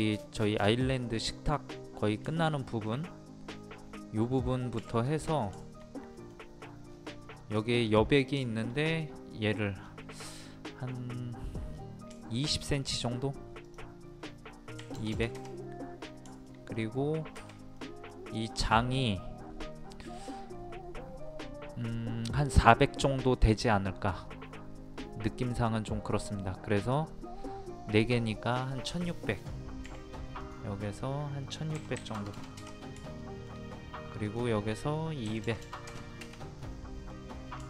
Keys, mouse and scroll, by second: 4.8 t, 5.2-5.5 scroll down 1, 5.6 shift+middle click, 6.6-6.9 scroll up 1, 8.4 shift+middle click, 9.8-10.4 scroll down 1, 10.4 middle click, 10.9 scroll down 1, 12.2-13.6 shift+middle drag, 13.6 click, 14.8 KP_2, 16.3 middle click, 18.4-18.9 scroll up 1, 28.1-28.5 scroll down 1, 28.9 middle click, 30.4 click, 31.7 KP_1, 33.2 shift+middle click, 35.2 KP_2, 36.6 middle click.